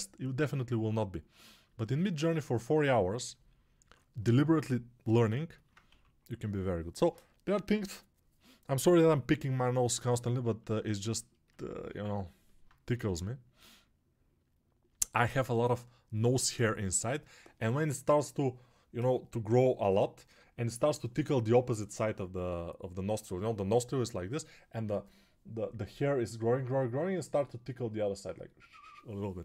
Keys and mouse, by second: 5.8 6, 12.8 g.